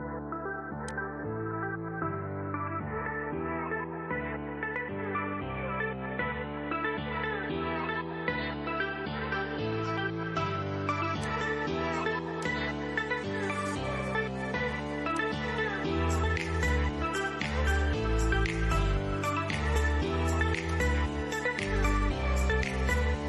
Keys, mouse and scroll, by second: 10.4 click, 14.4 click, 19.9 click.